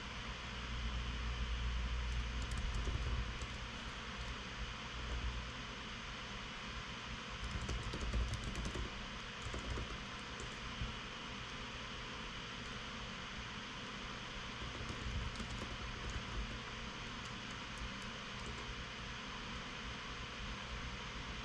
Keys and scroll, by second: 3.0 Return, 3.1-4.2 typing, 5.3-6.1 typing, 7.9-11.3 typing, 11.0 Tab, 14.9-17.4 typing, 18.8-19.5 typing.